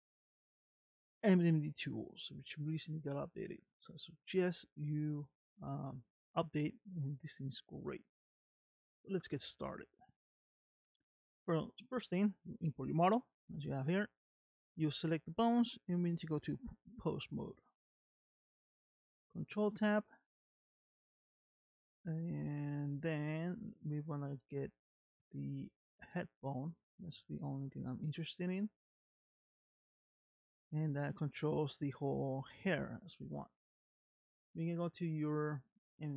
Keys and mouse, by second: 5.7 middle click, 6.6 shift+middle click, 17.3 ctrl+Tab, 20.3 middle click, 23.9 click, 24.4 middle click, 26.2 middle click, 27.0 r.